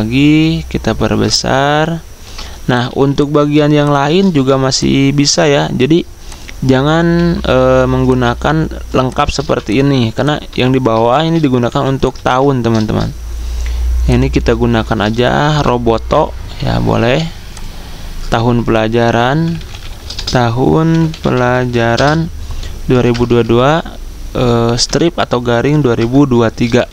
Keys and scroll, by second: 2.9 z, 4.0-4.7 typing, 7.7 z, 8.9 v, 11.7 t, 12.3 ctrl+a, 14.8-15.9 typing, 18.9-22.7 typing, 24.5-25.2 typing, 26.7 typing.